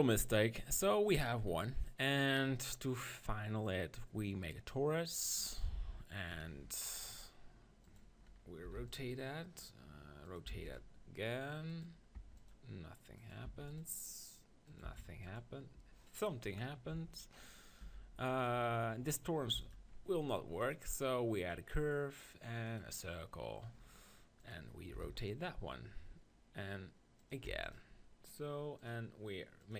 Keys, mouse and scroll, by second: 1.6 KP_3, 3.3-4.8 drag, 7.9-9.8 drag, 10.2-16.6 drag, 16.9 s, 17.8 g, 18.4-22.5 drag, 19.5 x, 24.4-26.4 drag, 27.2-29.7 drag.